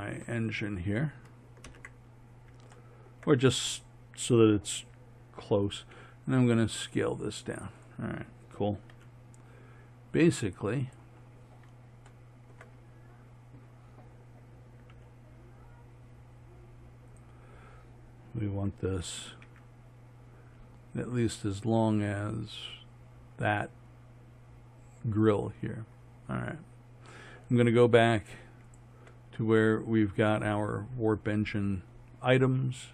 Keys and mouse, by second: 0.3-0.6 middle drag, 1.7 ctrl+KP_1, 3.0 click, 5.9 s, 8.9 g, 14.0 middle click, 14.9 g, 19.5 s, 25.8-28.7 middle drag, 29.7-32.9 drag.